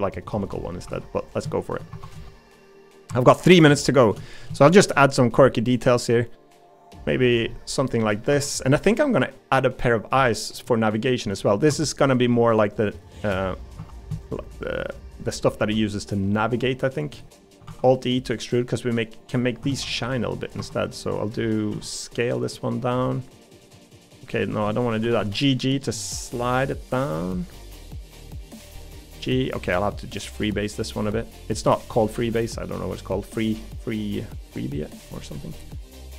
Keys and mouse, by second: 0.5 middle click, 0.8 3, 1.9 2, 3.1 2, 4.2 middle click, 5.9-7.5 drag, 7.5 middle click, 8.3 3, 8.9 middle click, 9.6 middle click, 10.3 middle click, 11.3 middle click, 13.8 3, 14.6 middle click, 15.6 1, 17.2 middle click, 17.7 alt+e, 19.7 ctrl+z, 20.0 middle click, 20.6 2, 21.7 s, 24.5 1, 25.0 g, 27.5 middle click, 28.4 click, 28.6 g, 29.5 g, 31.7 middle click, 31.7 g, 33.1-34.9 middle drag, 35.7 middle click.